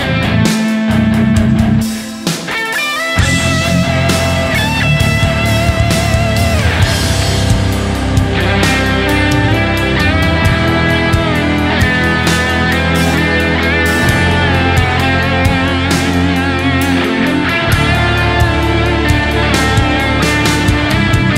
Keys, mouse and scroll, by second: 4.1 right click, 4.6 s, 4.9 click, 5.7 right click, 5.9 s, 6.1 double click, 7.9 right click, 15.1 shift+click, 15.2 shift+double click, 15.7 ctrl+click, 16.7 ctrl+click, 16.7 alt+right click, 17.8-18.9 typing, 20.9-21.3 typing.